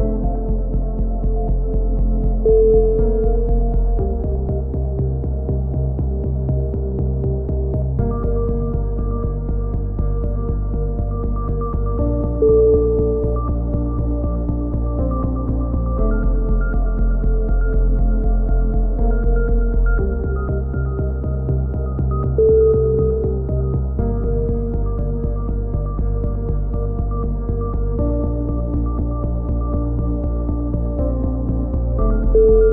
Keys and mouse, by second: 0.7 shift+q, 0.9 a, 10.9 click, 11.9 right click, 11.9 e, 13.2 middle click, 14.3-15.7 typing, 16.4 ctrl+l, 16.4 right click, 16.7 ctrl+i, 16.9 h, 17.5 KP_1, 18.7-19.5 drag, 18.7 c, 19.5-19.8 middle drag, 19.8-21.1 drag, 21.1 c, 21.7-25.1 right drag, 21.7 c, 25.1 a, 25.4-26.0 middle drag, 25.4 c, 26.0-27.3 drag, 26.0 e, 27.7 a, 27.8 z, 28.0-28.6 drag, 30.1-30.6 drag, 32.4 f.